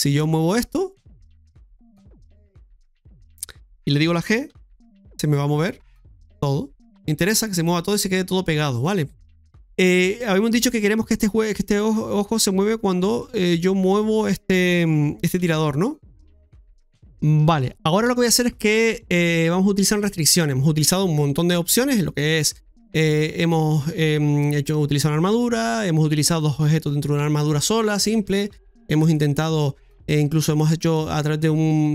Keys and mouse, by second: 0.0 middle click, 0.9 right click, 2.1 shift+right click, 9.3 ctrl+z, 9.6 middle click, 13.1 middle click, 13.9 right click, 16.4-17.3 typing, 16.8 middle click, 17.7 shift+middle click.